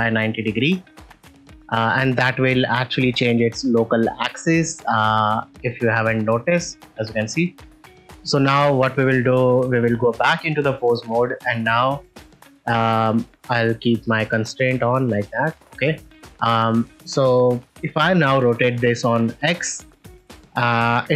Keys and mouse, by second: 2.1 ctrl+middle click, 3.2 ctrl+middle click, 4.1 shift+middle click, 4.4 middle click, 5.6-6.7 drag, 7.4 shift+middle click, 7.9 middle click, 8.2 shift+middle click, 10.0 ctrl+Tab, 11.3 click, 12.9 click, 14.6 click, 15.5 click, 16.4 ctrl+middle click, 19.2 r, 20.2 right click.